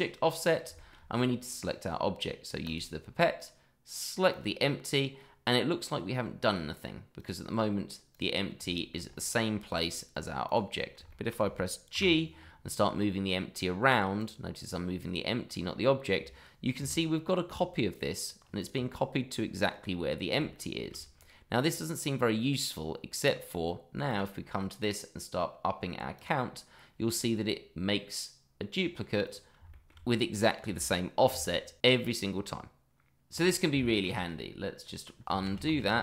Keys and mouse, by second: 0.3 middle drag, 0.7 shift+middle drag, 2.6 click, 4.3 click, 5.1-6.2 middle drag, 7.1 click, 8.1 click, 8.7 shift+middle drag, 9.8 click, 10.4 click, 11.1 shift+middle drag, 11.9 g, 14.2 click, 16.8 g, 20.5-20.9 shift+middle drag, 24.1 click, 26.2 click, 29.2 click, 29.7 shift+middle drag, 30.1 click, 30.6 g, 33.2 click, 33.8 shift+middle drag, 35.4 ctrl+z.